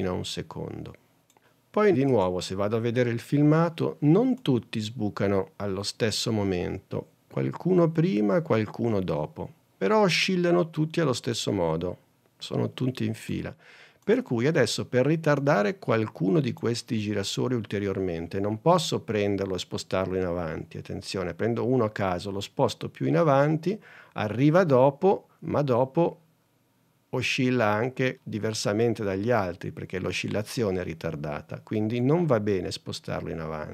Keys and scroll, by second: 2.4 super+Tab.